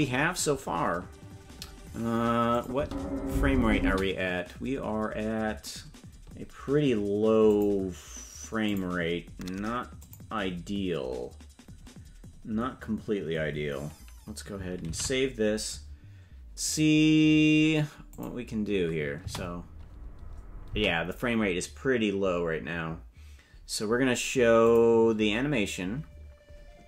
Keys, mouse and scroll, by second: 2.6 click, 2.8 space, 3.8 space, 7.5 click, 8.7 click, 10.0 click, 17.4 ctrl+s, 18.1 click, 19.2 space, 20.7 space, 26.1 space.